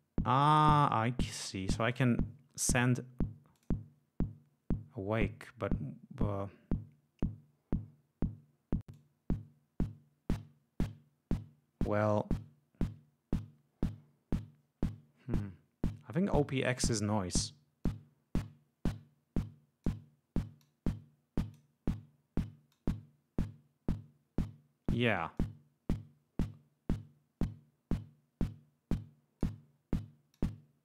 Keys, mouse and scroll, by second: 3.6 click, 8.9-12.3 drag, 17.8-20.0 drag, 20.6-21.7 drag, 22.7-25.1 drag, 25.4-29.6 drag, 30.3-30.8 drag.